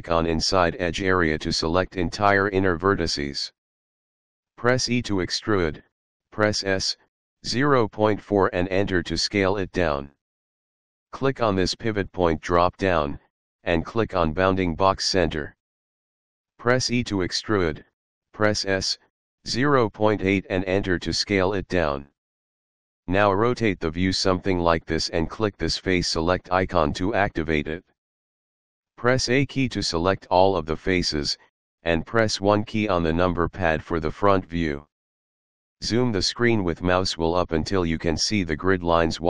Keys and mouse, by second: 0.4 alt+click, 1.8 alt+click, 4.6 e, 5.5 s, 8.7 KP_Decimal, 9.0 KP_4, 9.6 Return, 12.6 click, 17.1 e, 17.6 s, 19.6 KP_Decimal, 20.1 KP_8, 21.2 Return, 23.2 middle click, 27.7 click, 31.3 a, 33.9 KP_1.